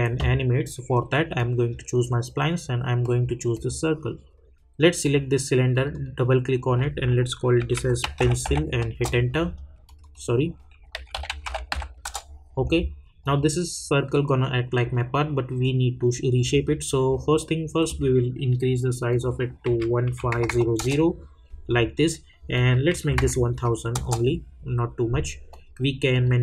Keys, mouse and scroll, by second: 7.6-8.4 typing, 8.8 Return, 9.8 click, 10.8-11.7 typing, 12.0 Return, 13.2 click, 17.8 click, 20.7 Return, 22.5 click, 23.9 Return, 25.5 click.